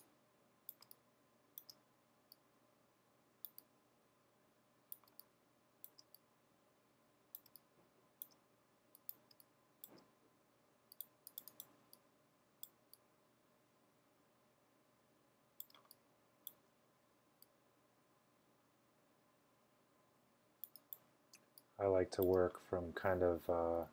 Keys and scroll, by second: 0.0-1.7 typing, 5.0-6.0 typing, 7.2-10.0 typing, 15.8-17.1 typing, 19.4-20.1 typing, 21.4-22.3 typing.